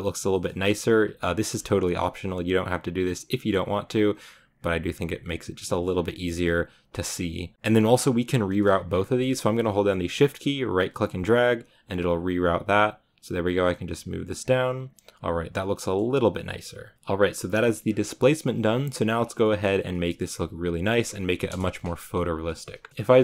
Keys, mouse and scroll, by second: 1.9 shift+right click, 3.2-7.0 right drag, 7.5 ctrl+z, 10.9 shift+right click, 12.2-16.9 right drag, 16.9-17.3 scroll up 3, 17.3-18.1 scroll down 9, 18.1 click, 18.5-19.1 shift+middle drag, 19.1 scroll down 2, 19.3-21.3 shift+middle drag, 21.3 KP_0, 22.3 shift+middle click, 22.9-23.2 scroll up 9.